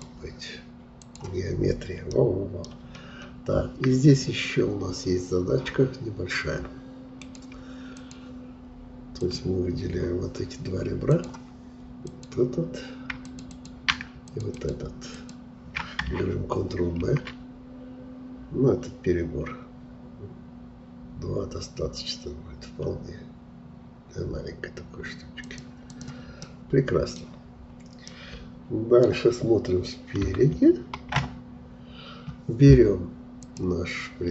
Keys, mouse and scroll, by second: 1.6-2.1 scroll down 1, 2.1 middle click, 2.9-5.5 scroll up 2, 5.5-6.0 scroll up 1, 7.2-10.8 drag, 11.1-17.0 drag, 17.0 ctrl+b, 25.8 click, 26.4 middle click, 27.2-28.1 scroll down 1, 28.1-30.1 middle drag, 30.1 KP_3, 31.0 KP_1, 33.4-34.3 drag.